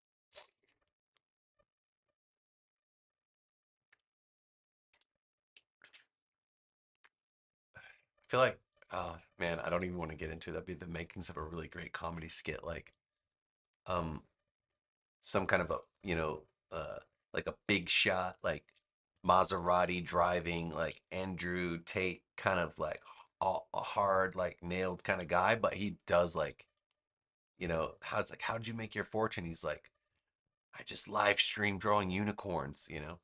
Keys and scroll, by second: 5.7 super+c, 11.9 super+c, 13.8 super+v, 19.0 super+=, 19.8 space.